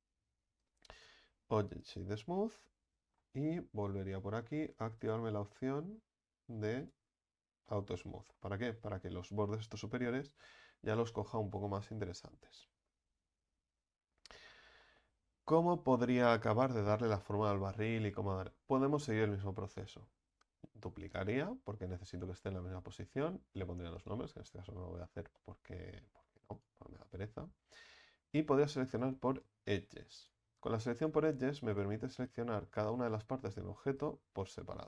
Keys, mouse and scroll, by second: 1.9 click, 2.5-6.8 middle drag, 6.8 click, 6.9 click, 7.7-8.3 middle drag, 8.3-9.1 scroll up 5, 9.1-10.6 scroll up 1, 10.6-11.1 scroll down 3, 11.1-14.2 middle drag, 14.2-14.8 scroll down 1, 14.8-20.5 shift+middle drag, 20.5 shift+d, 24.0 click, 24.9 Tab, 25.3-26.1 middle drag, 26.1-26.5 scroll up 2, 26.5 right click, 27.1 alt+shift+right click, 28.9-30.2 drag, 30.2 alt+shift+right click, 31.0 alt+shift+right click, 31.7 alt+shift+right click, 32.4 ctrl+z, 32.8 alt+shift+right click, 33.1 middle click, 34.0 alt+shift+right click, 34.5 alt+shift+right click.